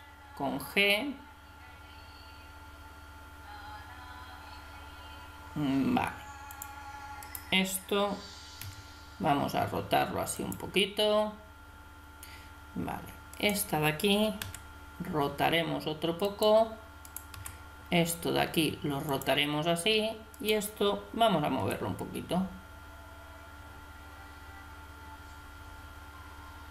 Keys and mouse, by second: 7.3 right click, 8.6 r, 13.4 right click, 14.4 r, 17.1 right click, 17.3 r, 20.3 right click, 21.6 g.